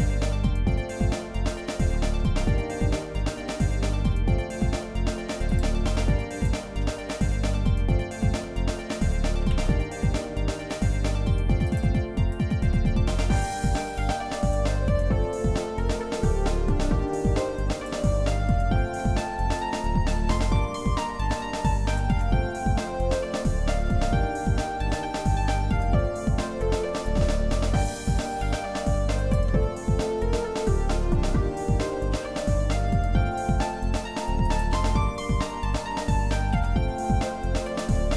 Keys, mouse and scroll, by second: 0.7 middle click, 1.1 scroll down 2, 1.4-1.8 scroll up 2, 2.0 middle click, 3.2 middle click, 3.5-4.0 scroll down 2, 4.1 middle click, 5.5 click, 6.3 shift+click, 7.3 shift+middle click, 7.9 scroll up 1, 9.4 shift+d, 12.3-14.7 drag, 15.0 middle click, 15.4 scroll up 1, 16.1-17.9 drag, 18.3 middle click, 19.9-22.1 drag, 22.3 middle click, 24.8 e, 29.6 middle click, 30.4 shift+middle click, 32.1 e, 34.9 middle click, 36.5 e, 38.0 shift+middle click.